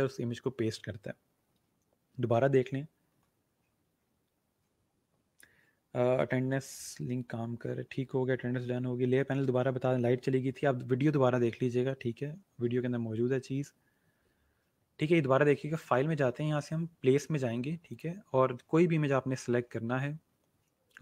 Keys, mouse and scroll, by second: 15.6 click, 17.8 click, 19.7-21.0 scroll down 1.